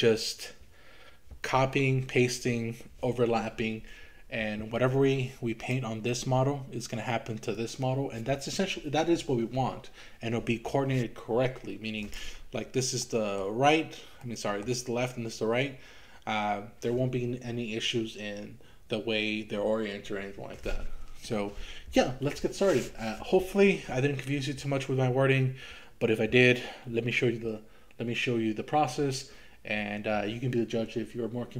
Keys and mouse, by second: 7.6 click, 12.1 click, 13.1 middle click, 14.2 middle click.